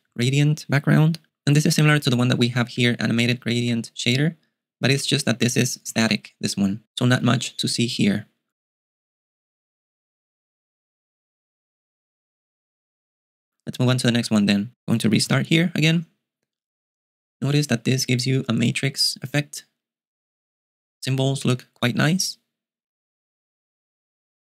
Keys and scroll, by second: 0.0-0.2 typing, 2.0 ctrl+u, 2.8-6.5 typing, 15.5 super+q.